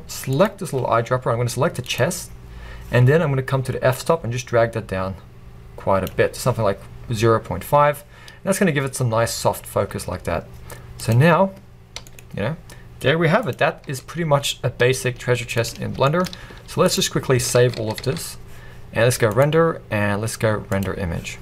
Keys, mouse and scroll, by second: 2.5-3.0 scroll up 2, 4.1-11.2 drag, 8.5-9.0 scroll up 2, 9.6-9.9 scroll down 1, 12.1 g, 13.6 click, 13.9 r, 15.7 click, 16.1-21.0 shift+middle drag, 17.0 z.